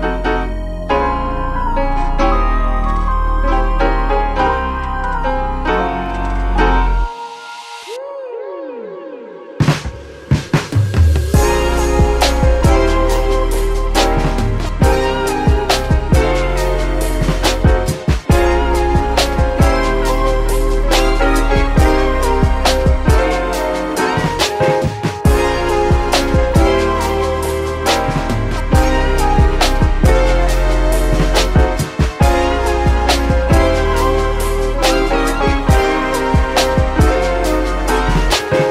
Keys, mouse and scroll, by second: 3.6-6.8 middle drag, 6.8 shift+a, 25.4 KP_Divide, 26.1-29.9 middle drag, 29.9 click.